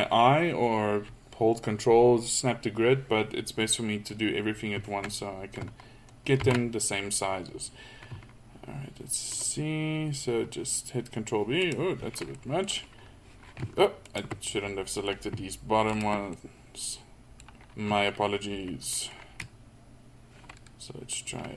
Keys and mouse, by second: 6.4 ctrl+b, 12.4 middle click, 14.1-15.1 middle drag, 16.3 middle click, 16.9-18.2 middle drag.